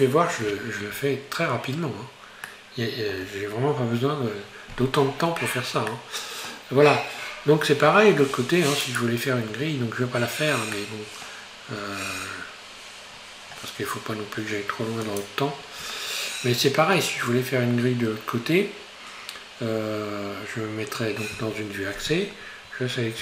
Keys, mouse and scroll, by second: 0.6 scroll down 2, 1.7 scroll down 2, 2.5-5.5 middle drag, 6.0-8.4 middle drag, 8.4 Tab, 8.9 right click, 9.5 Tab, 10.1 Tab, 10.8 middle click, 11.6-12.0 scroll down 2, 13.1-13.9 scroll down 7, 15.2 click, 21.4 KP_1, 22.9-23.2 scroll up 1.